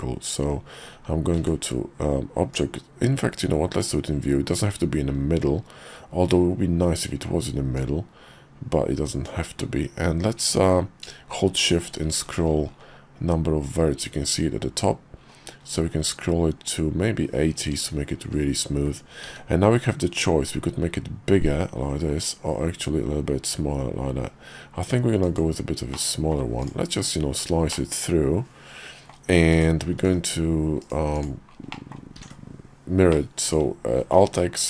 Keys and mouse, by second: 1.3 shift+v, 7.7-25.5 drag, 26.0 middle click, 27.7-29.1 middle drag, 29.5 click, 30.0 alt+x, 31.1 click, 31.7 middle click, 32.2 alt+x, 33.1-34.2 middle drag.